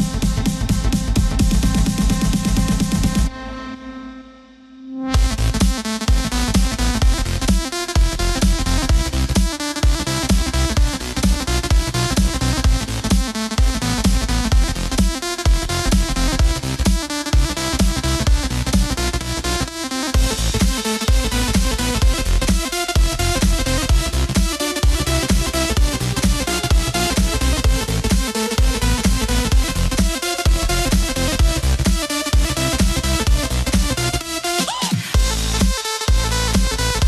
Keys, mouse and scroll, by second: 1.7-3.0 middle drag, 3.0-6.0 drag, 6.2 KP_7, 8.3 Tab, 9.2 Tab, 10.5 z, 13.8 ctrl+KP_Add, 14.1 ctrl+KP_Add, 14.4 ctrl+KP_Add, 14.6 ctrl+KP_Add, 14.9 ctrl+KP_Add, 15.1 ctrl+KP_Add, 15.4 ctrl+KP_Add, 15.8 ctrl+KP_Add, 18.0 r, 22.3 g, 25.1 g, 29.1 r, 32.2 g, 35.9-37.0 middle drag.